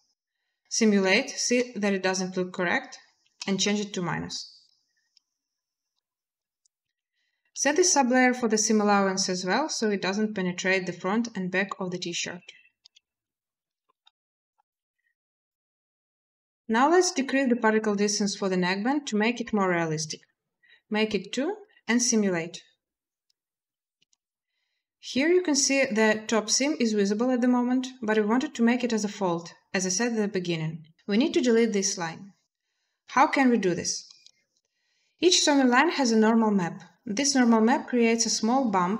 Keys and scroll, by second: 1.2 space, 3.0 space, 6.6 space, 12.6 a, 19.8 2, 20.0 Return, 21.5 space, 23.8 space.